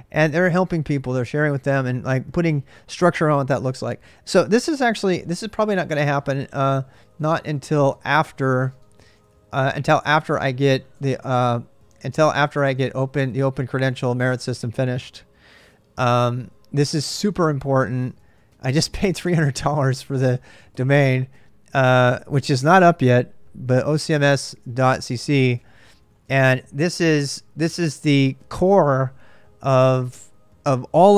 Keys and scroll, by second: 6.5-13.7 typing, 15.7-21.0 typing, 22.2-28.2 typing.